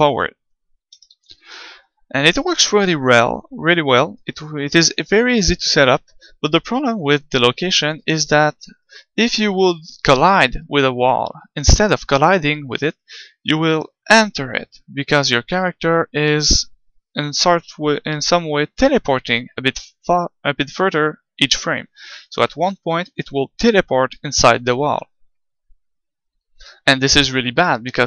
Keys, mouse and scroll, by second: 1.1 ctrl+z, 8.6 g.